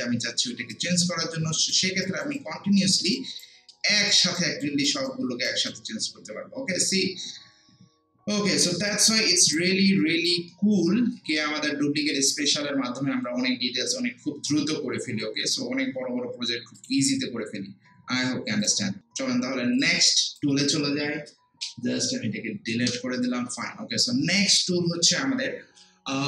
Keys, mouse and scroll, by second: 2.0 alt+right click, 2.4 alt+click, 3.1 alt+right click, 3.7 alt+middle click, 4.1 alt+right click, 4.6 alt+click, 5.1 alt+right click, 8.9-10.5 alt+right drag, 10.5 alt+middle click, 12.0 click, 16.7 click, 19.0 right click, 19.8-22.6 drag.